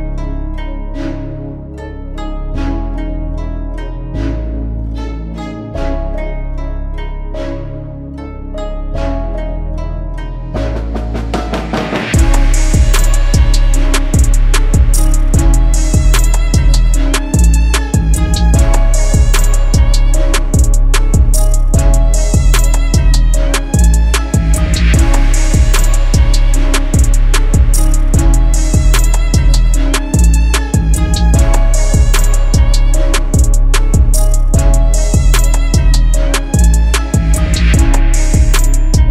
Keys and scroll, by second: 23.9 space, 30.2 Escape, 31.1 Escape, 32.3 Escape, 33.3 Escape, 34.9 Escape.